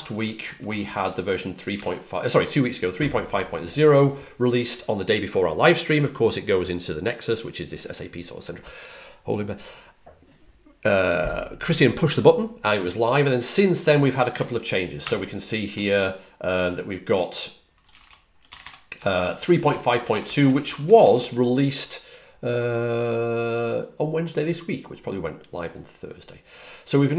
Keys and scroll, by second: 0.0-1.5 typing, 14.8-15.9 typing, 18.3-21.1 typing.